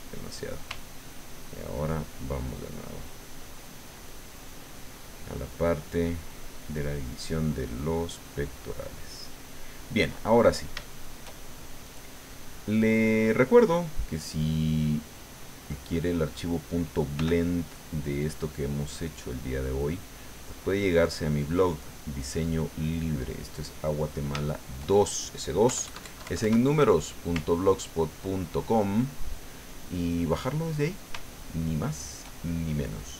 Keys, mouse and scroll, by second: 0.2 click, 1.0-5.7 ctrl+drag, 6.0-8.1 ctrl+drag, 8.5-10.0 ctrl+drag, 10.2-11.3 ctrl+middle drag, 11.5-12.9 shift+middle drag, 13.3 middle click, 14.5-16.4 drag, 17.2 f, 17.8 click, 18.4-20.0 drag, 20.8-23.2 drag, 23.3 middle click, 24.4 shift+middle click, 25.1 shift+middle click, 25.7 KP_Add, 27.4-28.8 ctrl+drag, 30.2 middle click, 31.3 shift+middle click, 32.5-33.1 shift+middle drag.